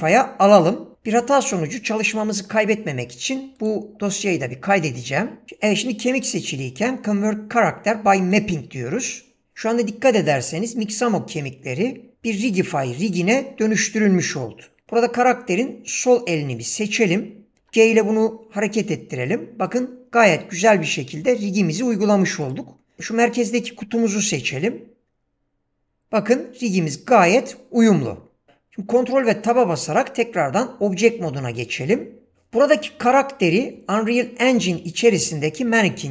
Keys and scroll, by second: 17.6 g, 24.4 g, 29.4 ctrl+Tab.